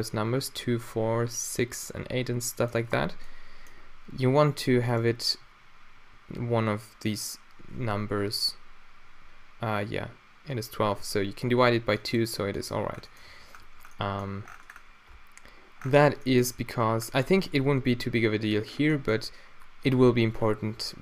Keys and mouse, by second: 4.9-12.4 middle drag, 12.7-13.2 middle drag, 13.4 Tab, 13.6 Tab.